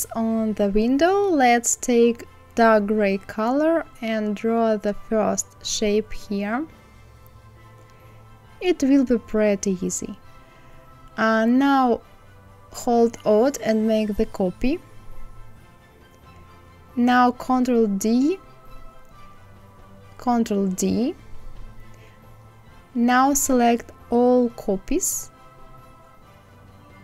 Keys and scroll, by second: 19.4 ctrl+d.